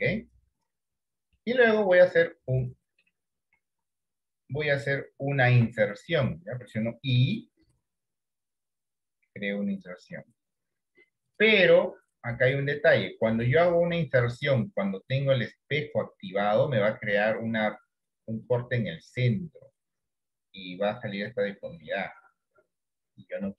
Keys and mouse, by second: 1.1 middle click, 1.9 shift+middle click, 2.3 middle click, 3.9 KP_7, 5.0 shift+middle click, 12.0 shift+middle click, 14.6 click, 15.9-16.9 drag, 18.6-23.2 drag.